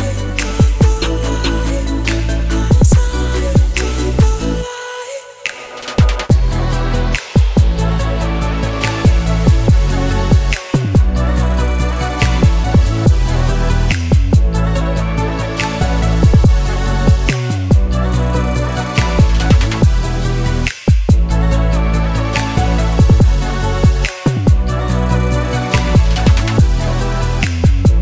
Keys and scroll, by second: 15.4 0, 15.9 Return, 26.4 BackSpace, 26.6 2, 26.9 Return.